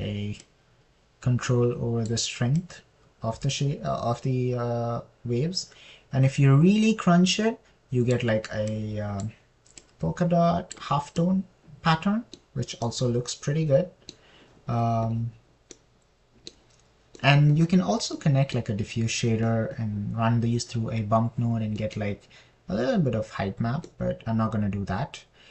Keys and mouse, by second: 0.0 middle click, 1.8-2.4 drag, 2.4-3.5 middle drag, 4.0-9.5 middle drag, 10.1 middle click, 10.3 click, 11.2 click, 20.8 middle click, 23.2 middle click, 25.3 middle click.